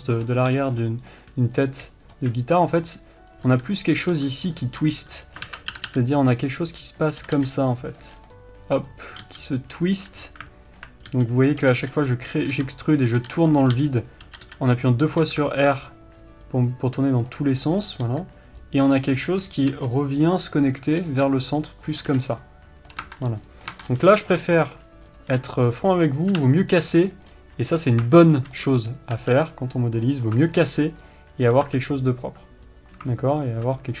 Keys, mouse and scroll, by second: 0.3-0.6 scroll up 1, 1.9 click, 2.9 scroll up 1, 3.2 e, 4.4 click, 4.5 s, 5.9 ctrl+z, 6.7 click, 7.0 e, 8.5 scroll down 1, 8.7-10.3 middle drag, 9.6 g, 10.3 r, 11.1 alt+click, 11.5 g, 12.0 r, 12.9 s, 13.6 r, 14.7 r, 16.0 alt+click, 16.2-20.1 middle drag, 18.4 r, 20.1 e, 21.0 click, 21.2 r, 22.0 shift+click, 22.4 f, 22.6 scroll down 1, 22.8-25.4 middle drag, 23.4 Tab, 23.6 scroll down 1, 24.1 Tab, 24.2-24.7 scroll up 1, 25.4 click, 26.2 x, 26.5 click, 26.9 x, 27.2-28.2 middle drag, 27.7-28.2 scroll up 1, 28.2 click, 28.9-30.9 middle drag, 29.5 f, 30.9 shift+click, 32.0 f, 32.5 click, 33.8 shift+click.